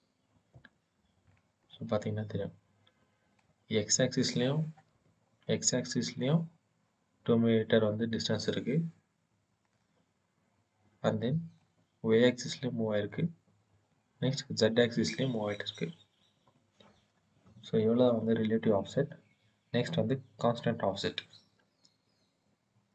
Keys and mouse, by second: 1.5-3.2 drag, 4.7 KP_1, 9.5-11.4 middle drag, 13.1 middle click, 16.1 KP_1.